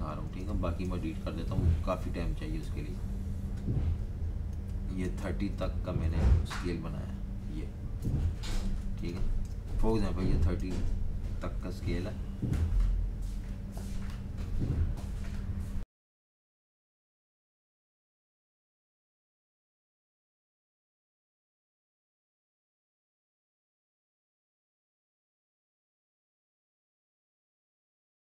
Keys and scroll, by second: 0.3-0.8 typing, 3.0 Delete, 4.3-5.8 typing, 7.0 Delete, 8.0 super+-, 8.2 super+-, 8.3 super+-, 8.5 super+-, 9.0-9.8 typing, 11.6 typing, 15.7 Page_Down, 17.1 super+-, 17.2 super+-, 17.4 super+-, 18.2-20.0 typing, 25.7 v.